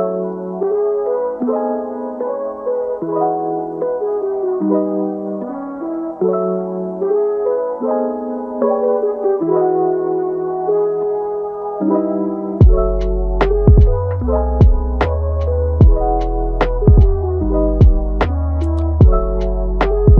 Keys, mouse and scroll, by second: 1.6 Tab, 2.0 click, 2.5-3.2 middle drag, 3.2 g, 4.5 click, 4.8 g, 5.8 click, 6.0 g, 7.0 a, 9.7 alt+s, 10.6-11.8 middle drag, 11.8 Tab, 12.3-12.7 middle drag, 12.7 Tab, 13.2 click, 14.1 g, 15.4-16.4 middle drag, 16.4 click, 17.0 g, 19.0 click, 19.3 g.